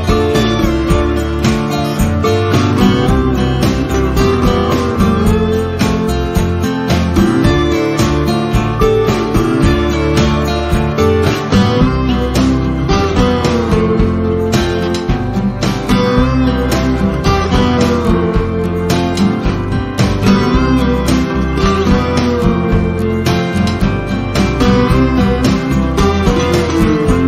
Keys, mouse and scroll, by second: 2.0 ctrl+F1, 2.8-5.3 drag, 6.0 F7, 7.8 click, 13.1 F1, 13.5 click, 14.3 ctrl+z, 14.9 click, 15.1 1, 15.4 Return, 16.3 ctrl+F1, 17.3-18.2 drag.